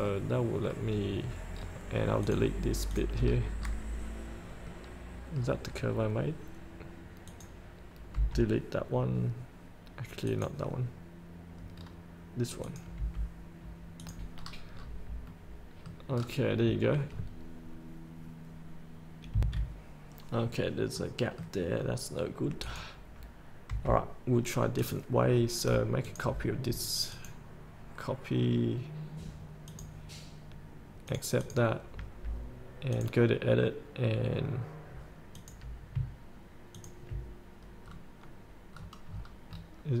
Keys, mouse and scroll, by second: 0.4 middle click, 1.4 scroll down 1, 2.5 click, 3.4-3.7 scroll up 1, 4.5-4.8 scroll down 1, 4.8 middle click, 5.8 scroll down 1, 7.5 click, 10.9 click, 12.0-12.8 scroll down 1, 12.8-13.9 drag, 13.1 Delete, 14.6-15.0 scroll up 1, 15.5 middle click, 15.9-16.4 scroll up 2, 17.0 scroll down 1, 17.3-19.5 scroll up 1, 19.5 F8, 21.2 middle click, 22.0 scroll down 1, 22.8-23.9 drag, 23.9 Delete, 25.0 click, 32.3-33.1 scroll up 1, 33.1 click, 37.0 ctrl+click, 38.0 scroll down 1, 39.4-40.0 scroll down 1.